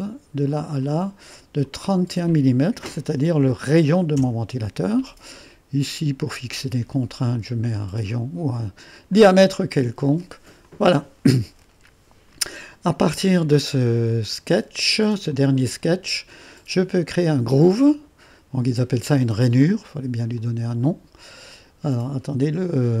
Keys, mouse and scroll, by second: 0.5-2.1 drag, 3.1 3, 3.4 1, 4.2 Return, 6.3 click, 7.4 click, 9.1 click, 10.7 click, 15.3 click, 20.4 click, 22.0 click.